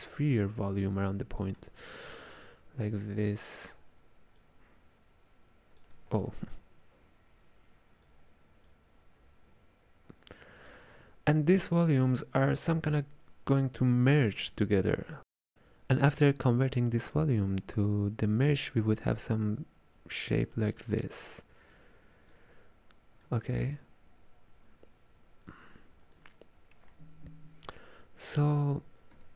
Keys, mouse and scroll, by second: 0.5-1.9 drag, 1.9 ctrl+z, 2.6-6.1 drag, 6.1 ctrl+z, 6.6-11.8 drag, 18.3-21.3 drag, 23.4-26.5 ctrl+drag, 27.8 click.